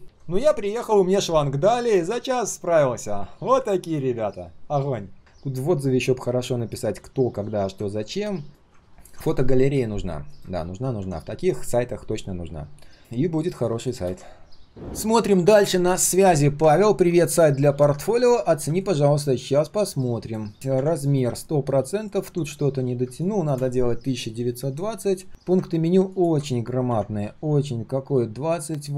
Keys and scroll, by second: 10.6 ctrl+s, 20.7 ctrl+\, 26.8 ctrl+\.